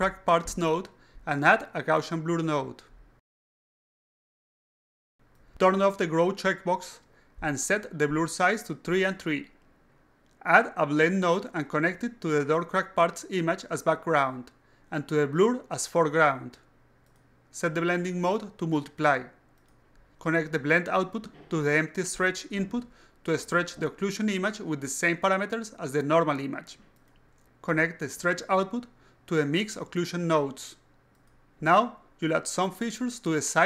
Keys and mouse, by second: 0.1 click, 1.8 click, 3.7 click, 5.4 click, 5.9 click, 9.0-10.2 drag, 11.8 click, 12.4-14.0 drag, 14.9-16.0 drag, 16.8 click, 18.2 click, 19.0 click, 19.6 click, 20.6-22.0 drag, 23.1-24.3 drag, 27.3-28.3 drag, 29.2-31.0 drag, 32.6-33.5 alt+drag.